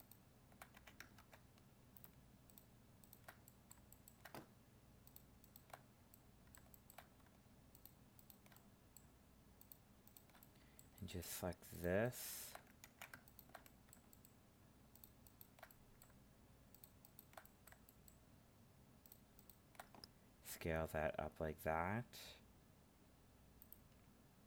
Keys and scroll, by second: 1.2 ctrl+Tab, 12.8 ctrl+z.